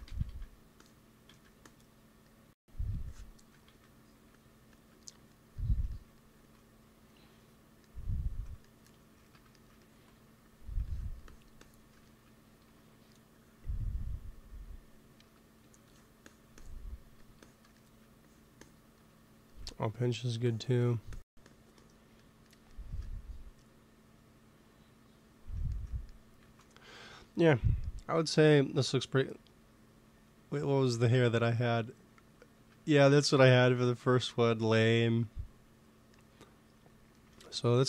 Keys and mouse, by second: 0.0 ctrl+z, 0.2 ctrl+z, 1.2 ctrl+z, 3.6 ctrl+z, 6.3 ctrl+s, 9.1 shift+c, 10.0-14.3 drag, 10.2 f, 12.5 t, 15.2 p, 15.9-21.3 drag, 17.0 f, 17.7 right click, 21.3 right click, 22.1-23.7 drag, 23.7 middle click, 26.3 ctrl+s, 29.4-31.2 drag, 31.3-34.0 drag, 34.1 click, 35.6-37.4 right drag, 37.6 ctrl+s.